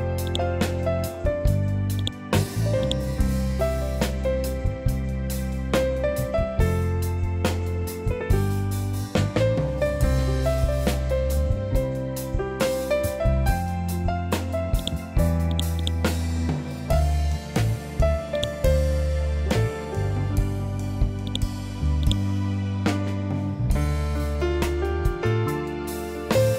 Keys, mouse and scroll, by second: 6.1 Delete, 11.9-12.5 scroll down 1, 14.7 click, 18.2 click, 19.1-19.7 scroll down 1, 21.2-23.7 drag, 23.7-24.3 scroll up 1, 26.1-26.5 scroll up 1.